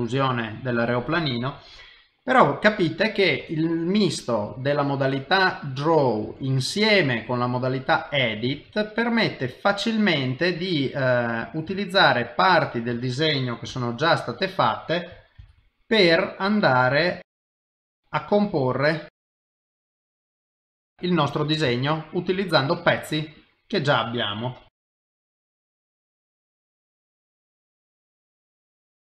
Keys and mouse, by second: 0.0 middle click, 0.2 shift+middle click, 2.4 middle click, 4.6 middle click, 6.6 middle click, 8.5 ctrl+Tab, 10.7 middle click, 11.8 ctrl+right click, 12.7 middle click, 13.7 KP_1, 15.4 shift+d, 17.5 middle click, 18.8 click, 19.2 x, 19.8 middle click, 20.3 middle click, 20.9 shift+middle click, 21.2 middle click, 21.7 ctrl+middle click, 22.4 middle click, 23.4 click, 24.8-28.3 typing, 25.7 middle click, 25.8 ctrl+z, 28.6 middle click, 29.0 middle click.